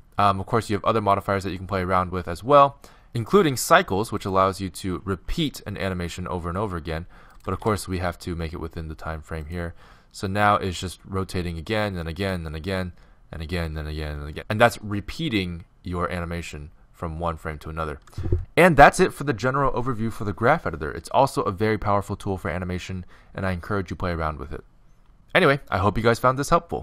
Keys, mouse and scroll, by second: 2.5-6.7 drag, 5.0-7.3 middle drag, 7.3-10.7 right drag, 7.5 g.